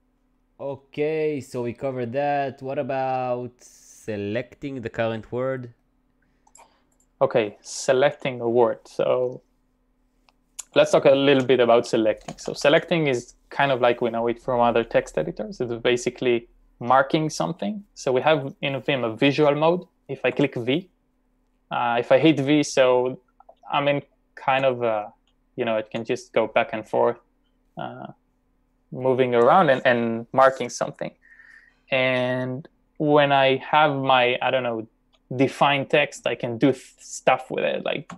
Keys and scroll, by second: 10.9 typing, 20.4 shift+v, 23.6 typing.